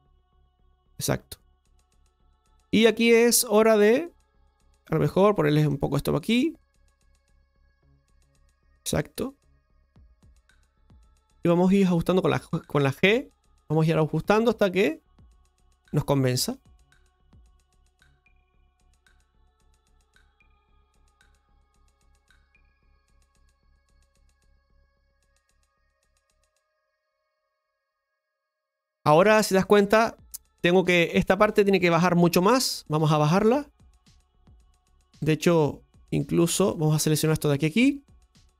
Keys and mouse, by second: 0.3-4.7 middle drag, 4.7-5.7 right drag, 5.7-7.1 drag, 7.1-10.8 middle drag, 13.0 right click, 13.6 g, 14.2 right click, 16.4 g, 17.0 right click, 17.1 g, 19.9 right click, 21.5 g, 22.2 right click, 24.1 g, 25.0 right click, 26.3 g, 27.0 right click, 28.1 g, 28.7 middle click, 32.3 right click, 32.8 shift+right click, 33.4 shift+right click, 33.7-35.1 middle drag, 36.9 ctrl+shift+right click.